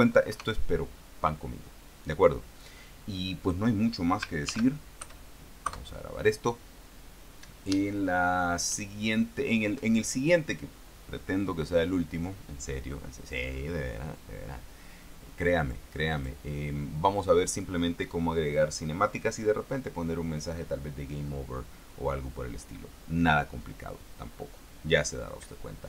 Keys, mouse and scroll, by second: 0.6 KP_0, 4.8 ctrl+shift+s, 5.3 ctrl+shift+KP_Add, 6.2 KP_Enter, 15.9 click, 16.5 click.